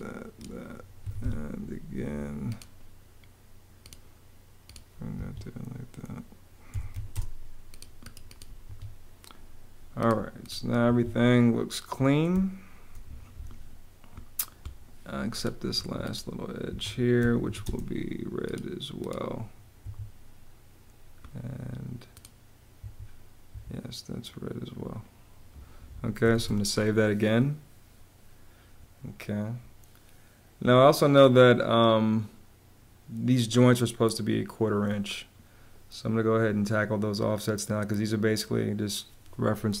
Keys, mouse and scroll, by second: 0.7 Escape, 1.8 Escape, 4.8 Escape, 6.1-7.1 typing, 8.3 Escape, 10.5 Escape, 11.9 space, 15.4 Escape, 16.5 Escape, 16.6-17.6 typing, 19.5 Escape, 22.4 Escape, 23.5 Escape, 26.0 super+s, 39.5 space.